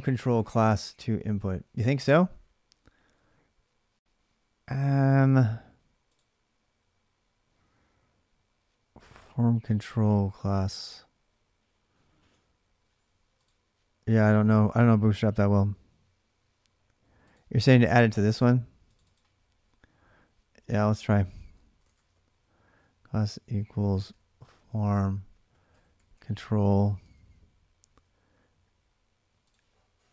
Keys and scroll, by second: 20.0 Left, 20.3 Left, 21.2-27.0 typing.